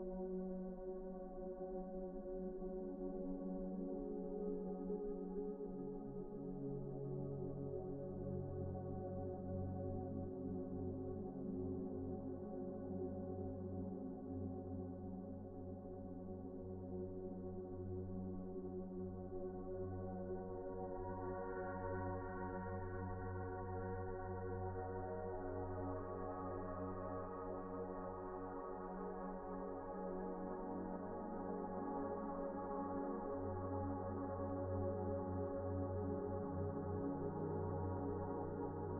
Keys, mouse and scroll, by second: 0.4-1.2 scroll up 1, 1.2 middle click, 1.7-3.2 scroll up 1, 3.8-4.5 scroll down 1, 4.5 middle click, 7.3 scroll down 1, 7.6 scroll up 1, 7.9 shift+middle click, 8.3-9.2 scroll up 1, 9.7 shift+middle click, 11.9 typing, 12.1-13.5 scroll up 1, 13.9 scroll up 1, 14.2 shift+middle click, 14.5 scroll up 1, 14.9 shift+middle click, 16.7-18.2 typing, 17.6 Escape, 24.2 Return, 25.1 typing, 26.1 Return, 27.3-28.2 typing, 28.2 Return, 29.4 typing, 30.0 Return, 31.7 typing, 32.3 Return, 33.2-33.9 scroll down 1, 34.8-35.6 scroll up 1, 35.6 typing, 36.1-36.6 scroll down 1, 36.6 right click, 37.3 Escape, 38.1-38.7 scroll down 1.